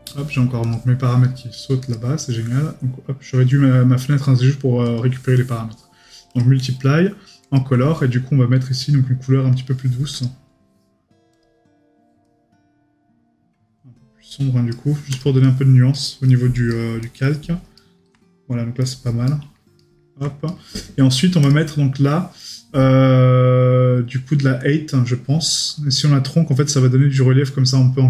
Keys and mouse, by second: 6.8 right click, 15.4 right click, 16.3 middle click, 16.7 right click, 17.2 middle click, 17.8 right click, 18.8 middle click, 19.3 right click, 22.4 right click.